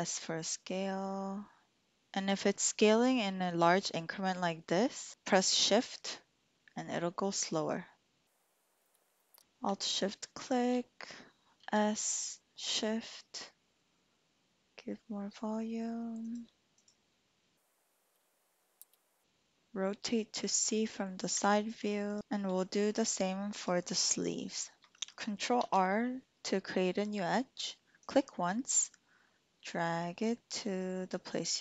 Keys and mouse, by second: 1.7 Escape, 10.3 alt+shift+click, 11.6 s, 16.2 shift+click, 16.8 click, 17.1 click, 18.4 click, 19.5 click, 19.7-21.0 middle drag, 22.0 alt+shift+click, 23.6 click, 24.8 Tab, 25.5 ctrl+r.